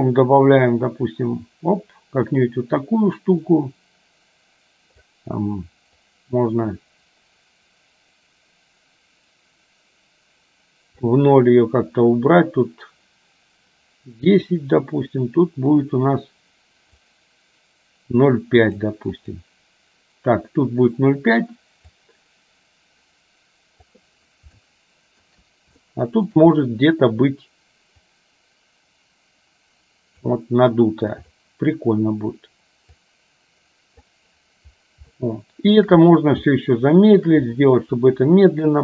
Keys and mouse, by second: 6.2-11.2 drag, 14.7-17.2 drag, 18.8 click, 19.3 click, 22.3-24.2 drag, 24.7 shift+middle click, 26.1 shift+middle click, 28.3-30.3 drag, 31.3 click, 33.3-34.4 drag, 35.2 shift+middle click, 36.6 shift+middle click.